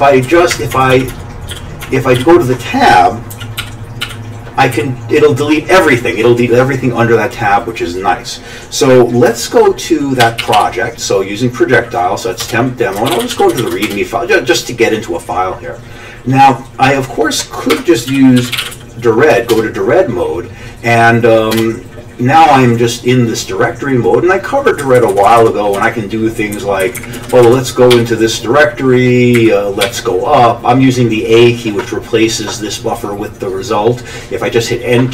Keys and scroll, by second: 0.3 Down, 0.5 Up, 0.8 Tab, 0.9-4.7 typing, 1.1 Tab, 1.8 Tab, 10.2 ctrl+c, 10.4 typing, 12.4 Return, 12.9-14.1 typing, 17.7 Escape, 17.9-19.2 typing, 19.5 Return, 21.5 Return, 24.8 Down, 25.0 Down, 25.1 Down, 25.3 Down, 26.8 Up, 27.0 Up, 27.2 Down, 27.3 Down, 27.4 Down, 27.9 a, 29.4 Up, 29.9 a.